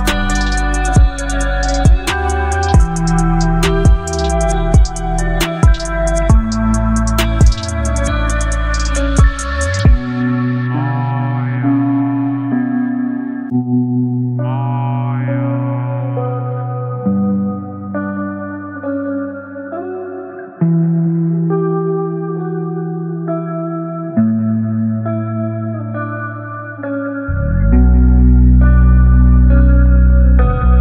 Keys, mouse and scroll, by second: 2.8 v, 3.9-8.0 drag, 9.7 right click, 12.1 click, 16.3 click, 20.9 click, 25.5 alt+scroll down 1, 28.7 ctrl+0, 29.4 b.